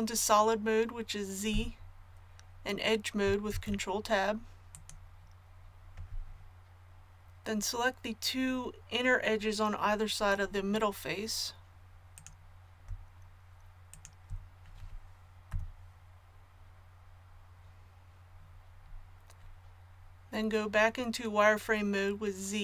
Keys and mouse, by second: 1.5 z, 3.5 ctrl+Tab, 15.5 KP_1.